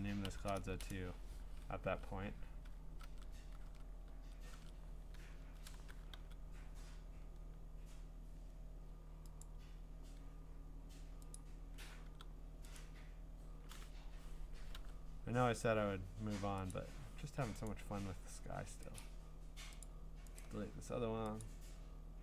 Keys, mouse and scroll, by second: 0.2 BackSpace, 0.7 Return, 1.8 ctrl+Tab, 3.0 ctrl+Tab, 3.6 ctrl+Tab, 4.6 ctrl+Tab, 5.3-5.7 scroll, 6.1 g, 9.4 click, 10.3 scroll, 11.4 click, 12.1 g, 12.8 right click, 13.9 Escape, 14.7 u, 15.4-15.8 scroll, 16.7 click, 17.7 right click, 19.0 click, 19.8 click, 20.4 right click, 21.4 click.